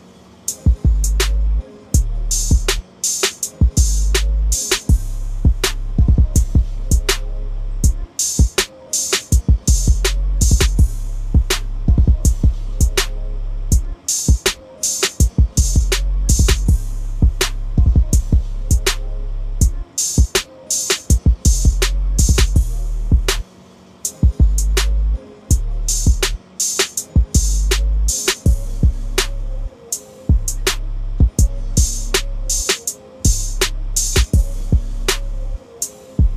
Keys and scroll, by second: 4.8 ctrl+a, 5.3 ctrl+c, 6.3 ctrl+n, 6.6 Return, 7.7 ctrl+v, 13.7-14.5 typing, 17.7 ctrl+a, 18.3 ctrl+c, 21.1 ctrl+v.